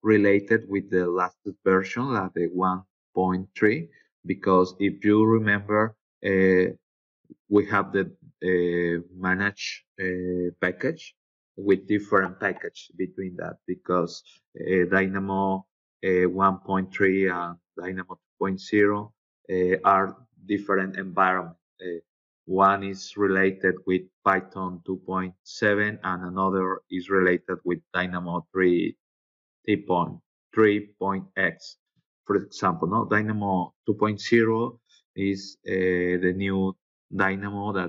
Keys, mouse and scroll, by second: 1.0-2.2 scroll up 6, 6.0 click, 6.7 click, 14.6-15.6 scroll down 4, 24.2-24.9 scroll down 3, 30.3 scroll down 2.